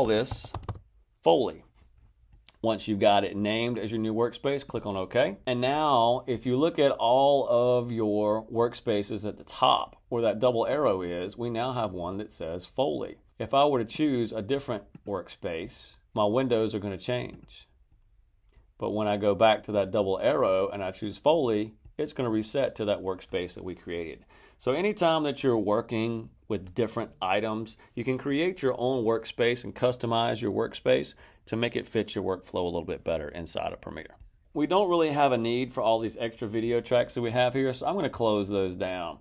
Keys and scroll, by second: 0.0-1.1 typing.